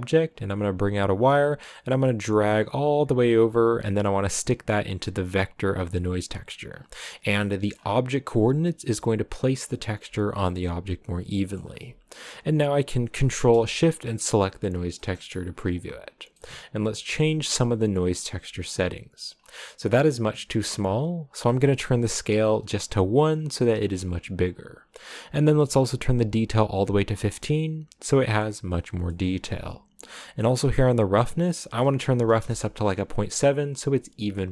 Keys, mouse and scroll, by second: 7.0-8.2 middle drag, 8.2-10.0 scroll up 5, 10.4-14.1 middle drag, 14.1 ctrl+shift+click, 18.6-19.3 scroll down 1, 19.3-20.1 scroll down 2, 22.9 click, 26.3-28.3 drag, 28.3 middle click, 29.1-32.3 scroll up 2, 32.3-34.5 drag.